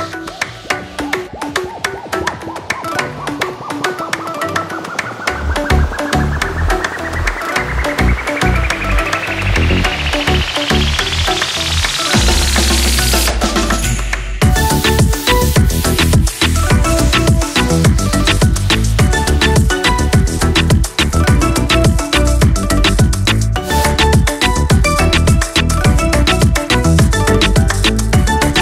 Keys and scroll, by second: 1.4 Delete, 5.1 Delete, 9.6 Delete, 10.6 ctrl+z, 10.9 Delete, 13.6 ctrl+z, 14.0 Delete, 16.0 ctrl+=, 16.8 Delete, 17.5 Delete, 18.7 Delete, 20.1 Delete, 22.5 Delete, 23.3 Delete, 25.0 Delete, 26.3 Delete, 27.5 Delete.